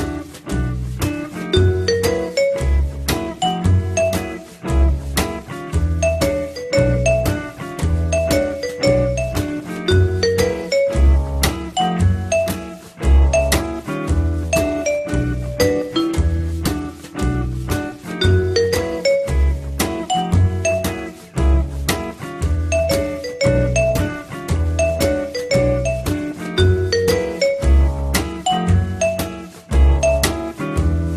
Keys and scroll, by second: 1.4 w, 10.8 m, 17.6 p, 18.2 z, 20.9 l.